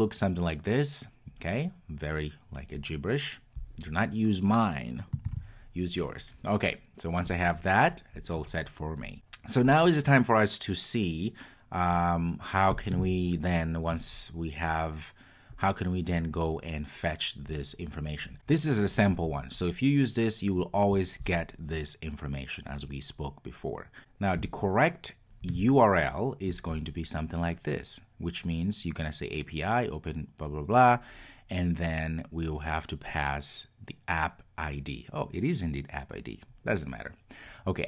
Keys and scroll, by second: 5.4 super+s.